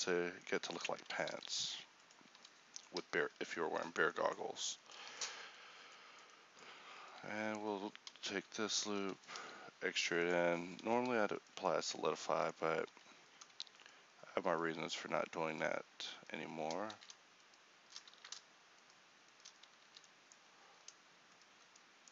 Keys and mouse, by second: 1.4 alt+s, 2.4 Tab, 3.2 KP_1, 4.8 Tab, 11.6 right click, 11.8 right click, 12.9 z, 17.0 ctrl+z, 18.2 ctrl+z, 19.9 z, 21.8-22.1 middle drag.